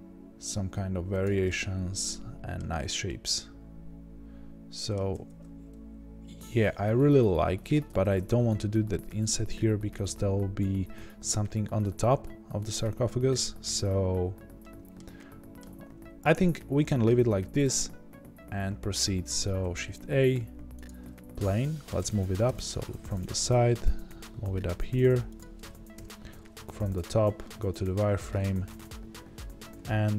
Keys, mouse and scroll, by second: 1.4-25.9 middle drag, 2.6-3.0 scroll down 2, 5.1 ctrl+z, 8.4-9.4 scroll up 2, 9.4-11.4 scroll down 2, 11.4-12.7 scroll down 1, 12.7-14.2 scroll up 1, 14.2-14.6 scroll down 1, 15.7 Tab, 15.9 scroll down 1, 16.5 scroll up 1, 17.8-20.8 scroll down 2, 20.8 shift+a, 22.4 KP_1, 22.9 scroll up 2, 23.3 g, 25.9 KP_7, 26.4 scroll down 2, 26.5-30.1 middle drag, 26.7 z, 28.0 Tab, 28.6 s.